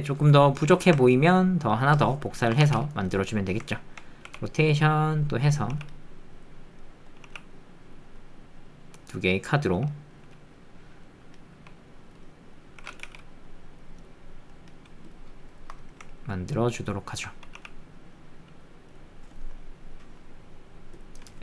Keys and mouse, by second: 1.1 ctrl+click, 1.4 middle click, 2.1 click, 2.7 shift+d, 3.2 middle click, 3.6 alt+click, 4.3 r, 5.2 click, 5.7 g, 6.8 click, 8.2 middle click, 8.2 g, 9.1 middle click, 10.3 middle click, 11.0 middle click, 11.5 r, 12.2 middle click, 13.0 z, 14.5 middle click, 15.8-17.1 alt+middle drag, 20.0 click.